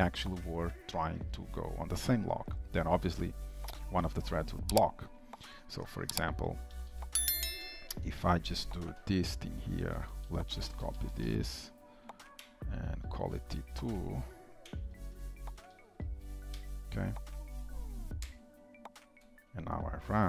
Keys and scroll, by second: 9.0 ctrl+/, 11.7 ctrl+d, 12.4 shift+Return, 14.7 Delete.